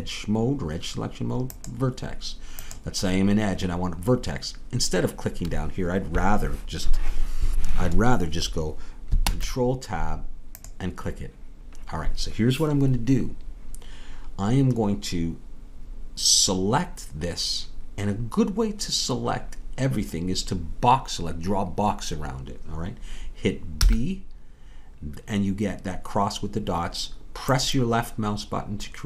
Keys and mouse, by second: 1.5-6.5 drag, 9.3 ctrl+Tab, 23.8 b.